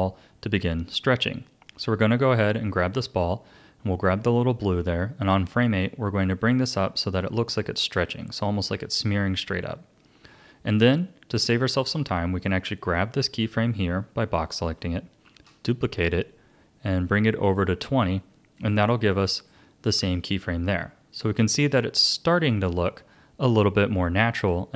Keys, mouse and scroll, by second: 2.0-5.2 drag, 10.7 click, 11.9-15.1 drag, 15.2 shift+d, 18.5-22.4 drag, 22.5-23.1 scroll down 2.